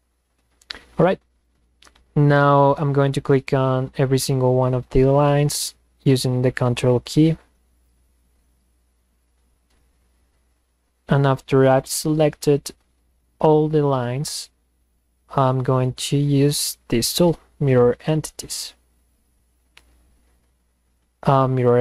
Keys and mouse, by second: 1.4 click, 2.6 click, 4.1 click, 5.1 ctrl+click, 6.7 ctrl+click, 7.8 ctrl+click, 9.2 ctrl+drag, 17.8 click, 21.6 click.